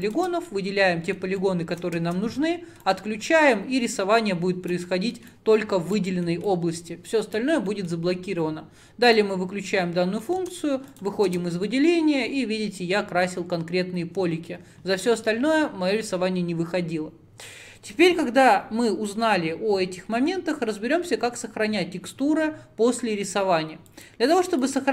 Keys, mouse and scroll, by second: 0.5-2.0 middle drag, 2.0 Tab, 2.9-4.9 drag, 4.9-5.4 middle drag, 5.4 click, 6.1-6.5 middle drag, 6.5-7.7 drag, 7.7-9.1 middle drag, 9.1-9.5 drag, 10.3 middle click, 10.5 Tab, 11.1 click, 11.3 Tab, 11.7-24.9 middle drag.